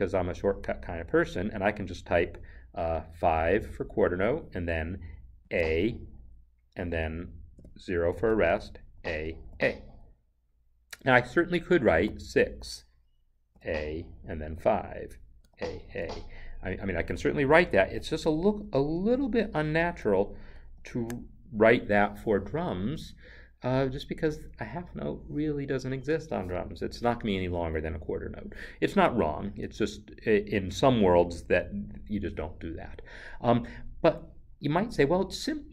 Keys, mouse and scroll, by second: 3.2 n, 3.3 5, 7.5 0, 8.8 a, 11.9 6, 13.5 a, 14.5 5, 15.4 a, 29.4 Escape.